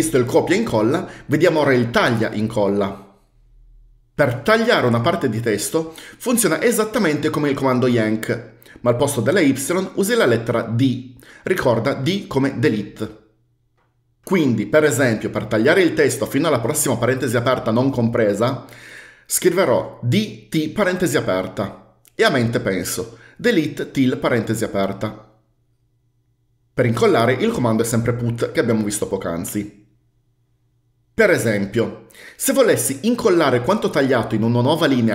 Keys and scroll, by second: 20.3-21.3 typing.